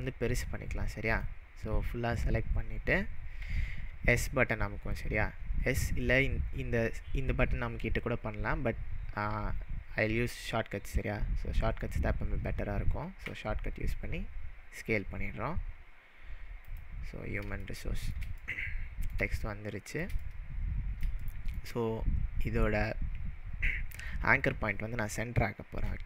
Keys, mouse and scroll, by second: 1.2-2.4 click, 13.2 s, 16.6 click, 17.6-18.2 shift+middle drag.